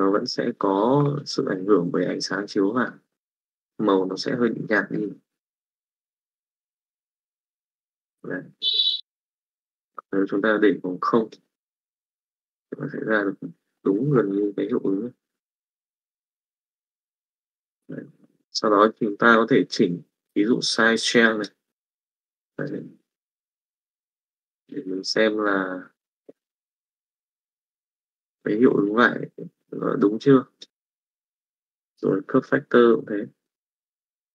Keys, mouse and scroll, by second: 1.2-2.8 middle drag, 3.3 middle click, 4.2 click, 4.9-7.7 middle drag, 9.2 click, 10.6 click, 11.6 middle click, 13.1 middle click, 18.2 middle click, 21.0 click, 22.4 middle click, 23.0-27.7 drag, 28.2 middle click, 28.9 middle click, 29.9 click, 30.8 click, 32.2-33.4 drag, 33.6 click.